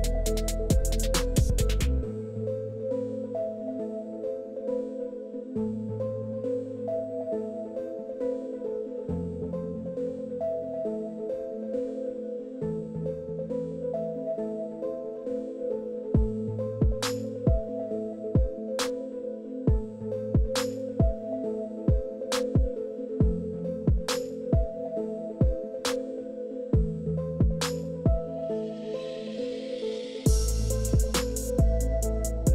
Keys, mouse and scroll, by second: 1.1 click, 2.7 click, 4.4 click, 5.3 click, 6.2 KP_1, 6.9 Return, 10.1 click, 13.3 q, 15.5 e, 18.1 click, 19.6 click, 20.5 click, 23.2 click, 25.5-28.1 drag, 28.8 click, 30.1 KP_5, 30.3 Return, 31.1 Escape, 31.7 click.